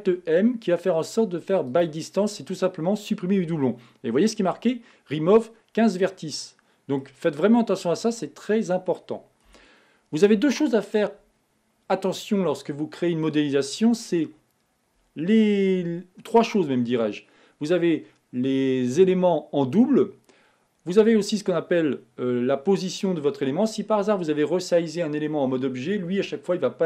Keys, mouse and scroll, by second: 0.1 alt+m, 6.4-7.7 middle drag, 7.7-8.2 scroll down 4, 8.2-9.8 middle drag, 9.8 Tab.